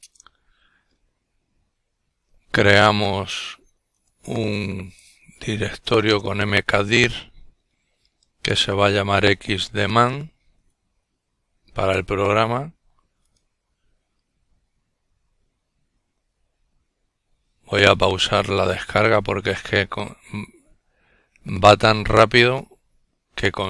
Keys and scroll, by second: 0.1-1.1 typing, 2.2-4.6 typing.